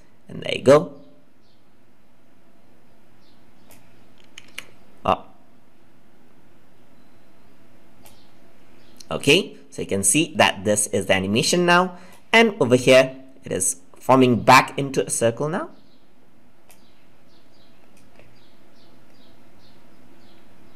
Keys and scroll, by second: 4.3 ctrl+z.